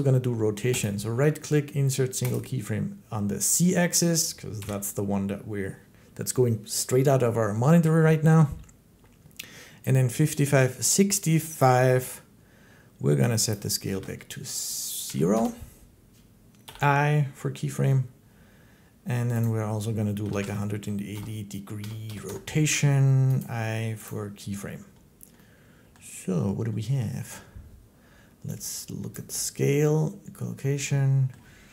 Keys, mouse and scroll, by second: 0.6 middle click, 2.2 click, 4.4 7, 11.4 click, 13.3 click, 13.7 typing, 14.9 BackSpace, 15.1 Return, 16.5 i, 19.3 click, 19.8-23.2 typing, 23.2 middle click, 23.9 click, 29.0 click, 31.1 middle click, 31.6 Home, 31.6 middle click.